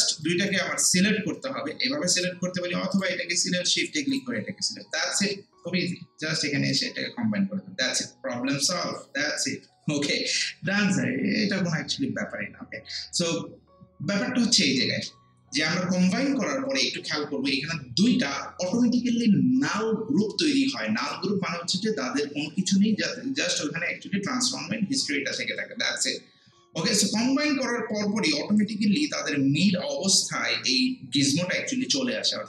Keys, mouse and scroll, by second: 0.2 click, 21.0 click.